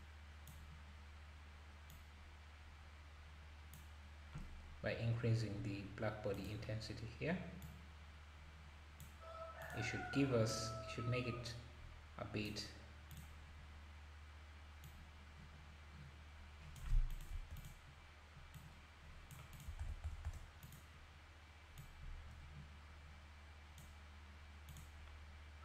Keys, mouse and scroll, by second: 0.7 click, 1.9-4.9 drag, 6.3 click, 7.0 click, 7.6-9.7 drag, 14.8-17.7 drag, 18.5-20.0 drag, 20.0 KP_0, 20.6 KP_0, 21.8-24.8 drag.